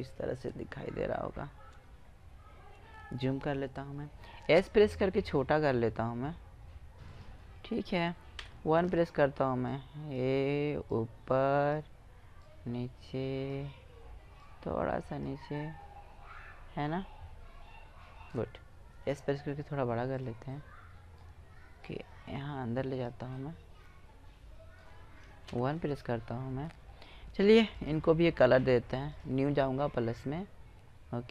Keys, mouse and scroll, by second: 3.6 s, 7.7 KP_1, 9.1 click, 9.4 click, 13.7 click, 14.9 click, 15.0 middle click, 15.1 click, 15.4-17.2 middle drag, 18.4 s, 19.8 click, 21.2-22.8 drag, 22.8 middle click, 23.6-24.8 middle drag, 24.8 KP_1, 25.7-26.6 middle drag, 27.1-27.9 drag, 28.5-30.5 drag.